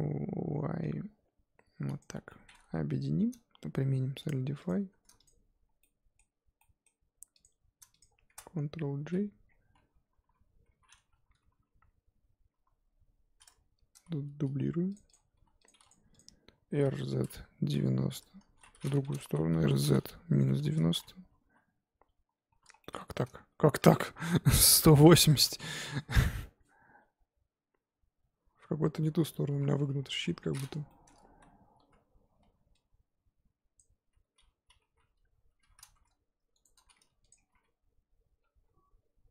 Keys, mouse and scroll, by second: 2.1 scroll down 3, 2.3-4.7 middle drag, 4.7 click, 5.8-7.4 middle drag, 7.4 click, 8.0 shift+click, 9.0 ctrl+j, 9.4-10.2 scroll down 4, 10.2 KP_7, 12.5 KP_1, 14.2 shift+d, 15.1 click, 15.3 g, 15.8 click, 16.7 r, 19.2 ctrl+z, 19.5 r, 21.4 KP_7, 22.8-24.1 middle drag, 24.1 r, 25.7 KP_1, 26.4-29.4 middle drag, 30.0 scroll up 2, 30.1 KP_1, 30.9 shift+middle click, 31.1 scroll up 3, 31.2 z, 31.8 Tab, 33.8 click, 34.1 z, 34.8 g, 37.2 click, 37.5 g.